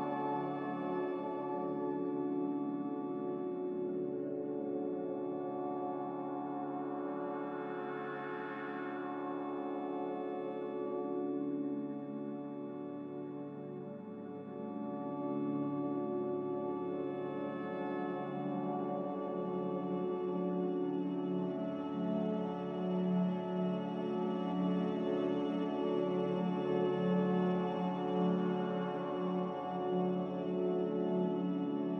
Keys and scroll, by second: 19.8 alt+Tab, 22.0-22.5 typing, 29.6 a, 31.0 q.